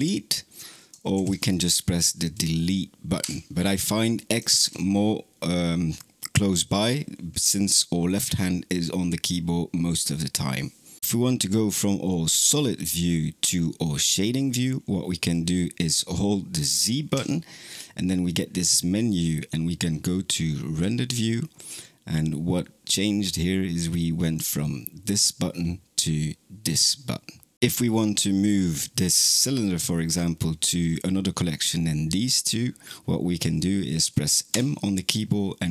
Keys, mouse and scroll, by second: 1.0 ctrl+z, 3.1 Delete, 4.4 ctrl+z, 17.0 z, 24.2 click, 26.5 click, 34.3 m.